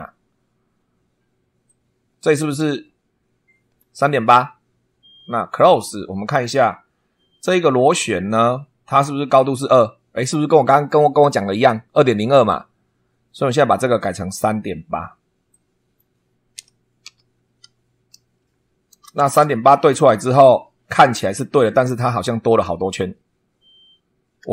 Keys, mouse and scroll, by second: 1.6-3.9 drag, 5.5 click, 7.8 click, 13.3 click, 13.9 click, 15.5 click, 16.5 3, 17.0 ., 17.6 8, 18.8 Return, 20.1 scroll up 2.